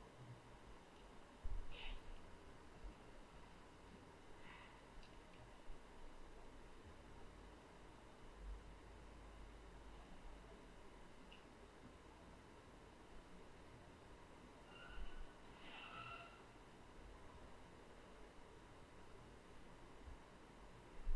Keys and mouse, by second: 4.2-21.1 shift+drag, 5.5 ctrl+z.